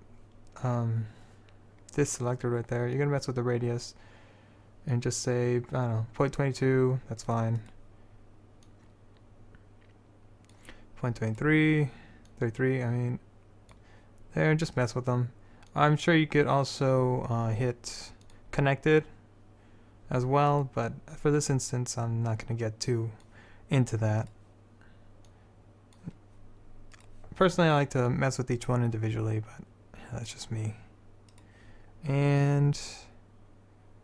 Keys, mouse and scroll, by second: 3.1-7.3 drag, 7.7-8.8 drag, 8.8-10.0 middle drag, 10.0-11.4 drag, 11.4 click, 12.4 middle click, 13.2-14.3 drag, 15.8 middle click, 21.5 middle click, 25.4 middle click, 28.2 middle click, 31.4-32.5 right drag, 32.5-34.0 drag.